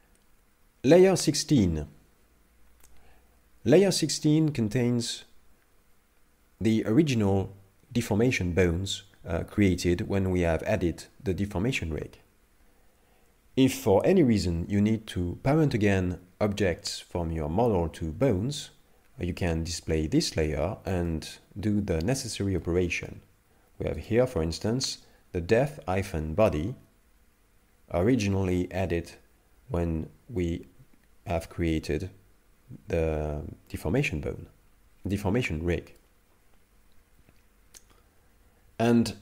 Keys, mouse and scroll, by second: 0.9 click, 3.7 middle click, 21.1 middle click, 22.6 middle click, 24.0 right click, 26.5 middle click.